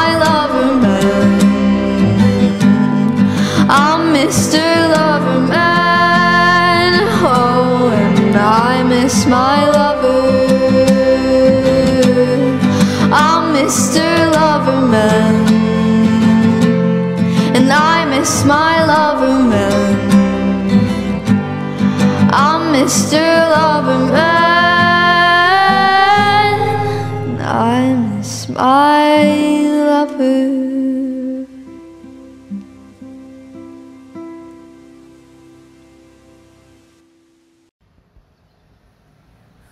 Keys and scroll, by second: 17.7 space, 20.5 space, 23.2 r.